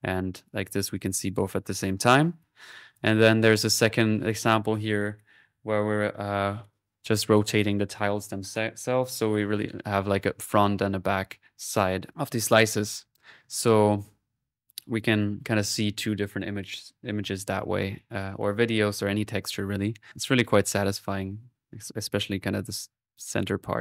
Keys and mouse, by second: 1.8 middle click, 2.7 click.